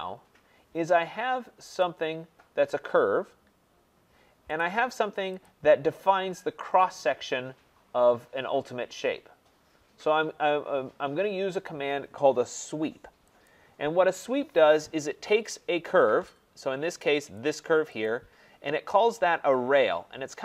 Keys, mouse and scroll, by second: 1.8 click, 4.6 click, 5.4 click, 13.4 click, 17.4 click, 18.0 click.